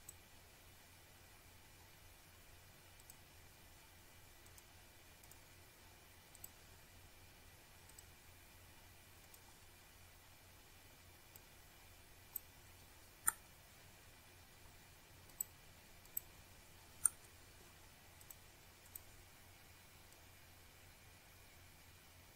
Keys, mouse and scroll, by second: 0.5 click, 2.4 click, 3.7 click, 5.9 click, 6.4 scroll down 1, 6.7-7.3 scroll up 1, 8.3 click, 11.2 click, 12.5 shift+click, 13.2 shift+click, 14.3 shift+click, 15.8 shift+click, 17.6-17.9 scroll down 1, 17.9-18.7 scroll up 1, 19.1 shift+click, 21.0 Delete, 21.8-22.1 scroll down 1, 22.1-22.3 scroll up 1.